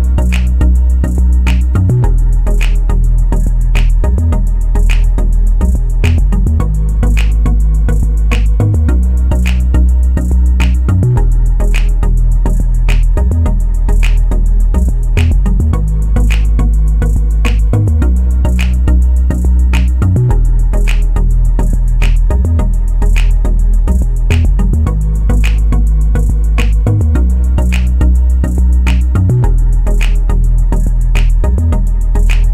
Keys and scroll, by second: 16.9 2, 17.3 Return, 25.6 ctrl+z.